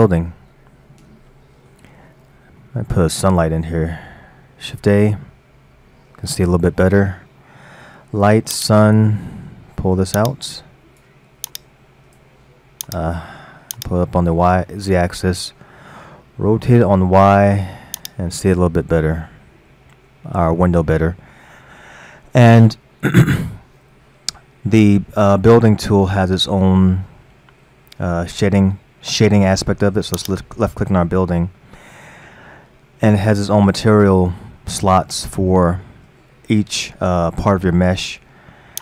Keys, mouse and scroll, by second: 2.2-2.5 scroll down 3, 2.6-4.7 middle drag, 4.7 shift+a, 9.3-10.3 middle drag, 10.3-11.6 drag, 12.9 click, 13.8-14.7 drag, 14.7-16.6 middle drag, 16.6 r, 18.3-19.1 middle drag, 19.1 scroll up 1, 19.8 scroll up 1, 20.1-23.9 middle drag, 30.2 click.